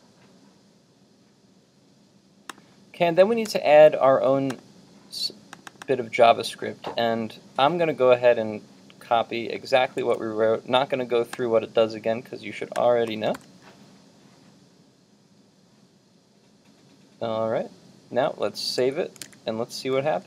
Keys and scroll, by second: 10.1 super+c, 13.4 super+v, 18.8 super+s, 19.4 super+Tab.